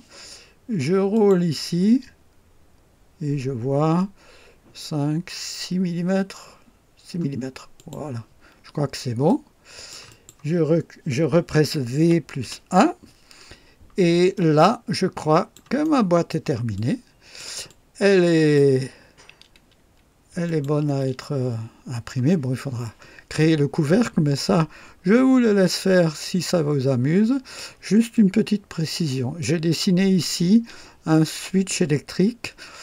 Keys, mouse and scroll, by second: 1.1 click, 1.6-2.5 scroll down 2, 3.0 scroll down 1, 4.9 scroll up 1, 7.7 click, 8.6-8.9 scroll down 1, 9.2 click, 12.0 v, 12.4 KP_1, 13.3 scroll up 2, 14.3-15.7 drag, 15.8 right click, 16.7 click, 17.6 click, 20.4 click, 20.8 space, 23.4 scroll down 1, 24.7-25.1 scroll down 1, 25.6-27.7 drag, 28.1-29.6 drag.